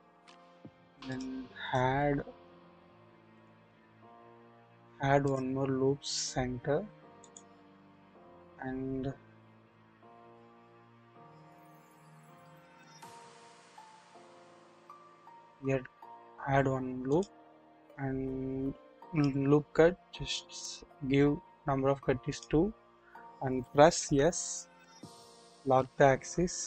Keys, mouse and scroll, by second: 1.1-1.7 drag, 3.3 click, 5.2 click, 7.2 click, 17.1 click, 19.1 click, 22.3 click, 23.9 s, 25.5 z.